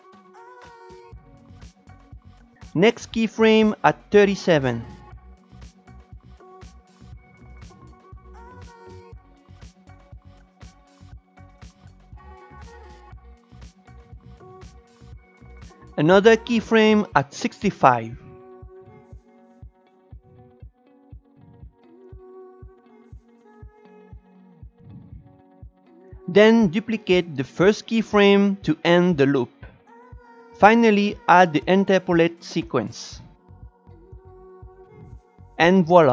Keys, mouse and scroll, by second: 0.5 click, 2.6-3.8 drag, 6.3 shift+right click, 7.1 click, 8.8 click, 9.7 shift+right click, 10.6-12.1 drag, 12.8 ctrl+z, 12.9 click, 15.1-16.6 drag, 21.0 shift+right click, 21.6-22.9 drag, 23.2 shift+right click, 23.5-24.9 drag, 25.3-26.8 drag, 27.7 click, 28.2 shift+d, 29.2-31.3 drag, 31.4 ctrl+shift+e, 32.1 click, 32.4 ctrl+shift+e, 32.8 click, 33.3 ctrl+shift+e, 34.0 click, 34.3 ctrl+shift+e, 34.6-36.1 drag.